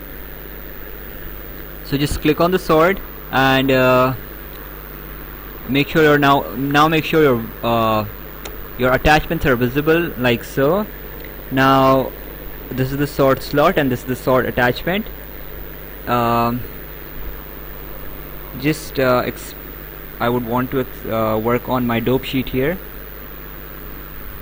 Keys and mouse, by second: 0.6 right click, 2.0 click, 9.4 click, 12.2 click, 13.8 click, 18.7 click, 23.0 right click.